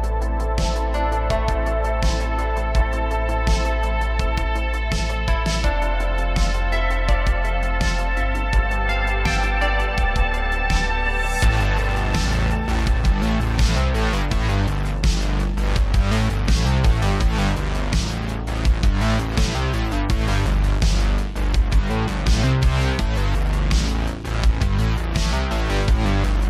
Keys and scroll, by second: 0.2 3, 7.6 Tab, 8.5 Tab, 8.7 3, 9.6 ctrl+KP_Add, 9.8 ctrl+KP_Add, 10.0 ctrl+KP_Add, 12.5 Tab, 15.5 Tab, 18.2 1, 19.9 c, 23.7 c, 24.7 c.